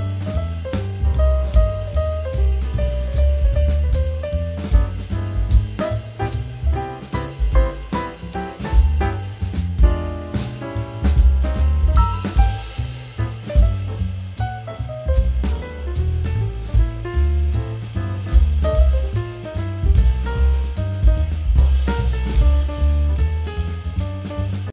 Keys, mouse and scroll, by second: 1.2 click, 7.4 ctrl+click, 7.6 ctrl+e, 8.3 click, 10.6 z, 10.9 click, 11.3 space, 11.5 click, 11.8 space, 14.8 click.